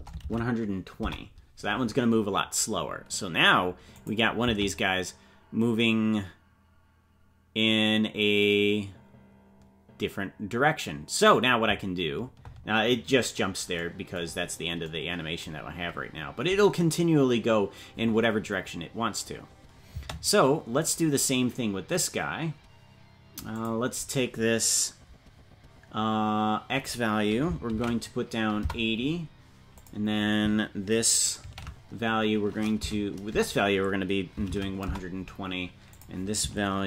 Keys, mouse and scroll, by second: 13.7-14.2 scroll down 2, 14.4-15.3 scroll down 3, 18.6-19.3 scroll up 3, 19.3 scroll down 1, 20.8 right click, 23.5-36.8 drag.